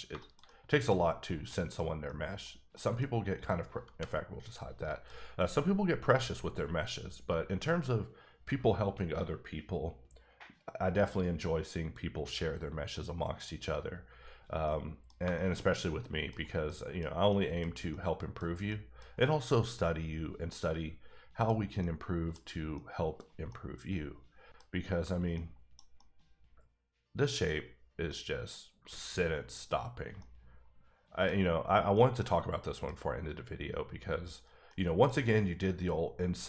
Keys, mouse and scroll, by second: 0.4 middle click, 1.0 scroll up 1, 1.5 middle click, 2.1 middle click, 2.7 middle click, 3.4 click, 3.9 h, 4.5 click, 4.8 middle click, 14.6 middle click, 15.2 shift+middle click, 15.6-16.0 shift+scroll up 2, 16.0 middle click, 16.6 middle click, 17.4 middle click, 17.6 scroll down 1, 17.9 middle click, 18.2 scroll down 1, 18.7 middle click, 20.6 middle click, 21.6 scroll up 1, 21.8 middle click, 22.8 scroll down 1, 23.5 middle click, 25.3 middle click, 25.7 scroll down 1, 25.9 middle click, 27.5-28.0 scroll up 2, 28.0 middle click, 29.8-30.2 scroll down 1, 30.2 middle click, 31.9 middle click, 34.7 middle click, 34.8 middle click, 35.1 scroll up 1.